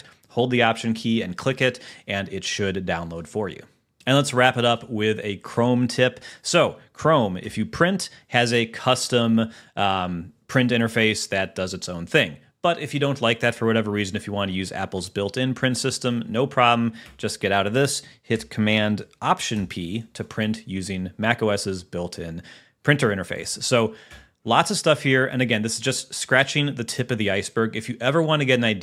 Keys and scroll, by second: 4.0 Escape, 8.0 super+p, 17.5 Escape, 20.2 alt+super+p, 24.7 Escape.